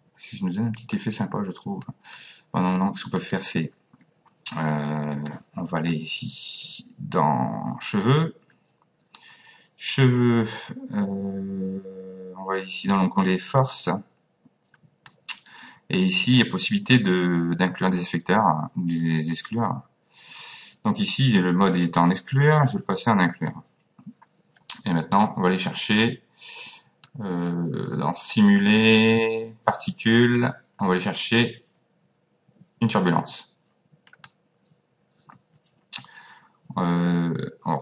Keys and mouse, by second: 1.8 click, 3.2 click, 5.3 click, 7.9 click, 13.6 click, 15.1 click, 22.4 click, 27.1 click.